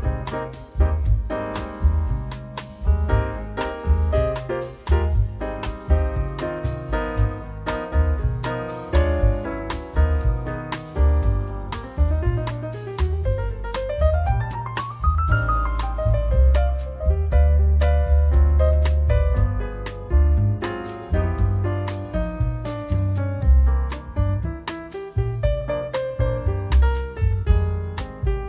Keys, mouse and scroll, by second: 0.3-1.8 drag, 3.1 click, 3.9-6.9 drag, 7.5 click, 8.6 click, 9.5 click, 10.9-12.4 scroll up 5, 12.7 click, 13.2 click, 16.3 0, 18.7 click, 19.4-21.5 drag, 22.9-25.5 drag, 25.7-27.0 drag, 27.1-27.5 scroll down 2, 27.7-28.1 scroll up 2, 28.3 click.